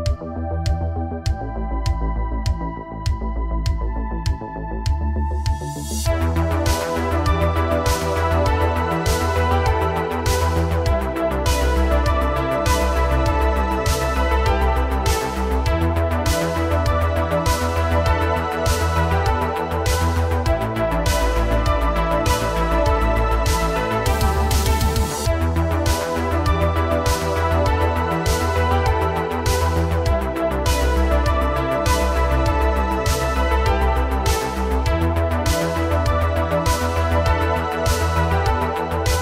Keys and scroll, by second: 2.0 ctrl+c, 2.2 ctrl+c, 4.5 ctrl+shift+v, 6.4 ctrl+v, 17.0 shift+d, 19.5 shift+d, 21.8 space, 31.0 g.